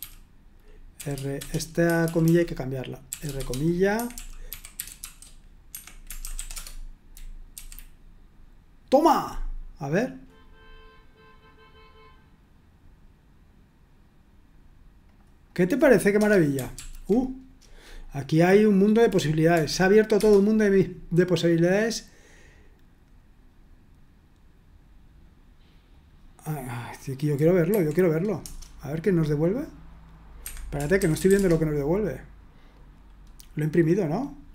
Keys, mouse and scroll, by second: 0.0-7.5 typing, 7.5 F5, 10.0 click, 15.1 click, 16.2 Return, 16.7 ctrl+p, 19.5 F5, 20.2 Return, 21.6 click, 25.9 click, 27.7 F5, 28.4 Return, 30.1 click, 30.4 Escape, 30.8-31.8 typing.